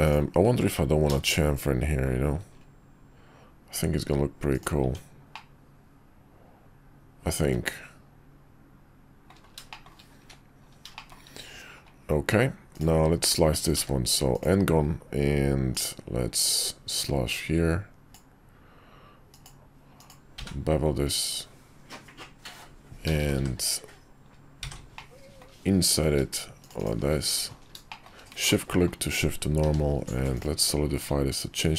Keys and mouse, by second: 1.1 ctrl+b, 4.8 Tab, 5.3-9.3 middle drag, 9.7 shift+middle drag, 10.2 `, 10.9 middle click, 12.7 click, 13.7 d, 15.7-18.1 drag, 25.0-26.9 middle drag, 27.9 shift+middle drag, 28.4-28.9 middle drag, 29.6 q.